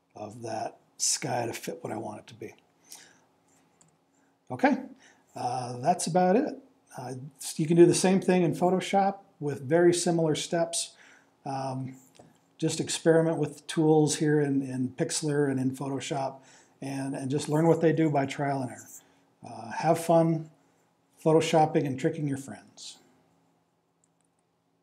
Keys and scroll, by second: 3.8 Return.